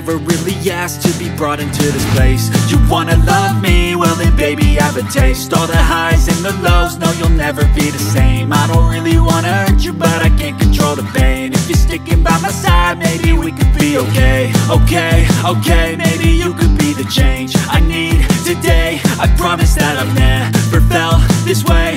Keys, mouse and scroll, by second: 19.3 Delete.